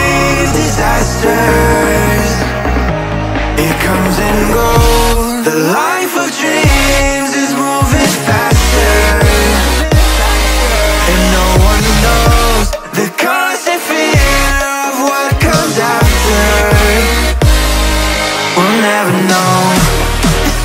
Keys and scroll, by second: 0.0 space, 5.4 ctrl+z, 12.0 v.